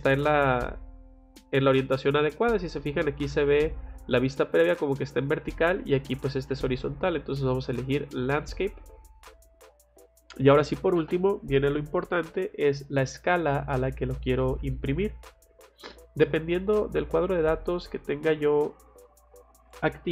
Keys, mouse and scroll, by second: 1.2 click, 8.2 click, 15.0 click, 16.6 click, 17.4 click, 18.3 click.